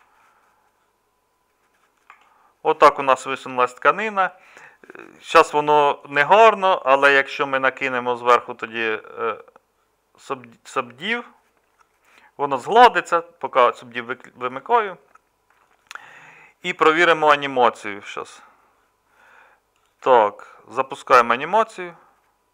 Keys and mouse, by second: 2.1 Tab, 3.5 alt+Tab.